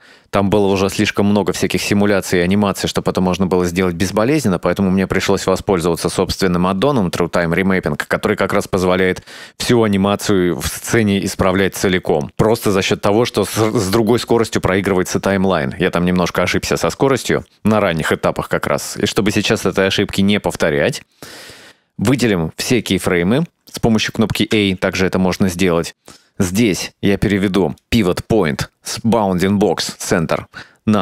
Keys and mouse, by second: 21.2-23.2 right drag, 24.6 a, 27.7-31.0 drag.